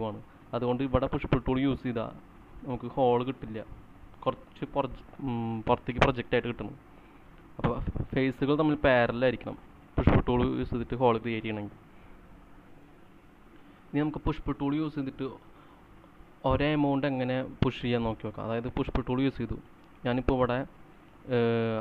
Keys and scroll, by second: 1.2-1.9 typing, 12.7 c, 15.8-16.5 typing.